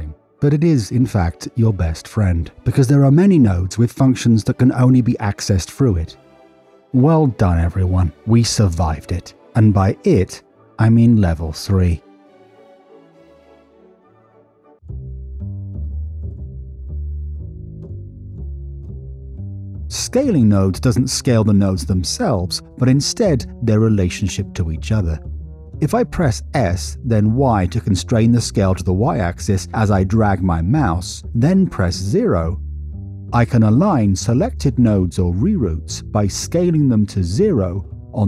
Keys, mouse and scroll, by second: 1.1 click, 2.1 click, 3.5 click, 4.5 click, 6.1 drag, 7.9 middle click, 9.7 n, 13.4-15.0 drag, 16.2-16.6 drag, 17.2 click, 17.8-18.7 drag, 19.2 t, 20.4 middle click, 21.4 middle click, 22.6-23.0 drag, 24.7-25.7 drag, 27.4 s, 28.3-30.1 y, 30.4 0, 31.2 click.